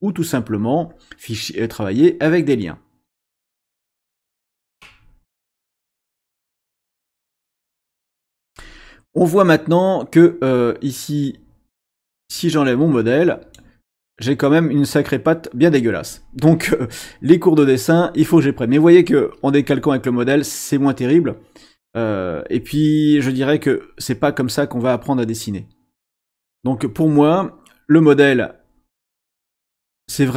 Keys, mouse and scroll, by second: 12.1-13.7 drag, 26.0 click, 28.3-29.8 drag.